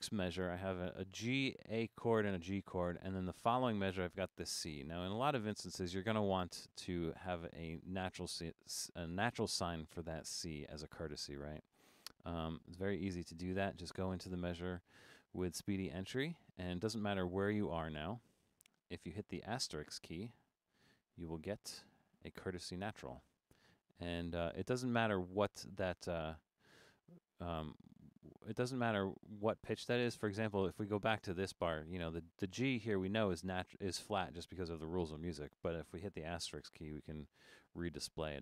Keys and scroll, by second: 15.9 Down, 16.8 Up, 17.0 Up, 17.1 Up, 17.3 Up, 17.5 Up, 17.6 Up, 17.8 Down, 18.0 Down, 18.1 Down, 18.3 Down, 18.4 Down, 18.6 Down, 19.7 *, 21.5 0, 27.2 Left, 27.4 Left, 27.9 Right, 28.3 Right, 29.5 Left, 29.7 Left, 29.8 Left, 30.0 Left, 30.1 Left, 30.2 Left, 30.4 Left, 31.3 Left, 31.5 Left, 31.7 Left, 32.5 Up, 32.7 Up, 34.5 Down, 34.7 Up, 36.7 typing, 37.8 typing.